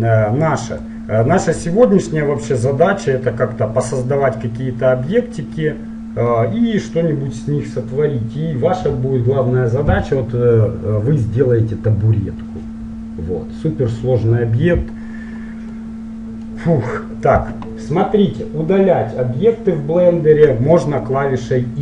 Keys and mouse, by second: 0.9-2.7 drag, 4.0 middle click, 15.9-21.8 middle drag.